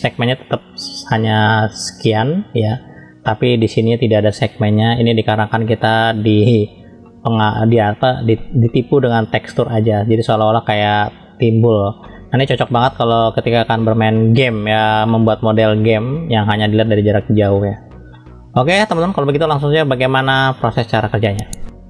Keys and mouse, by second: 0.4 click, 1.3 middle click, 5.2 drag, 5.8-6.8 middle drag, 7.0-8.4 middle drag, 8.7-10.5 middle drag, 12.0-13.2 middle drag, 13.7 middle click, 15.1 middle click, 18.1-19.0 middle drag, 19.5-21.1 middle drag.